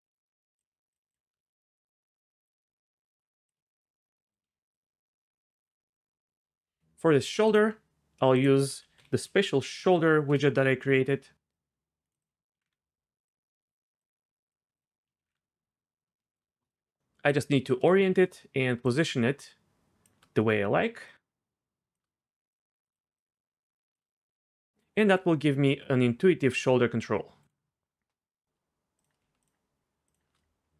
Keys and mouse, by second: 0.1 click, 0.9 click, 1.9 shift+click, 2.8 shift+click, 4.7 shift+click, 7.4 click, 8.3-10.3 drag, 11.5 click, 12.2 click, 13.3 click, 14.1 click, 14.8 click, 18.9-20.0 shift+drag, 21.0 shift+click, 22.6 shift+click, 23.2 shift+click, 25.0 r, 27.4 click, 28.9 click.